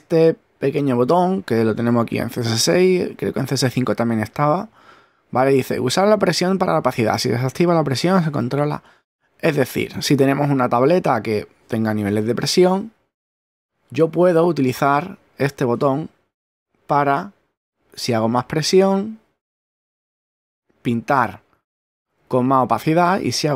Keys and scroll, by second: 21.0 super+z, 21.5 super+<.